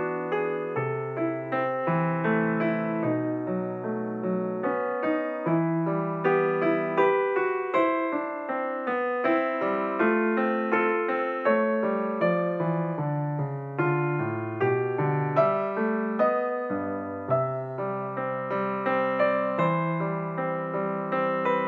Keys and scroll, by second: 8.6 space, 11.3 space, 15.0 3.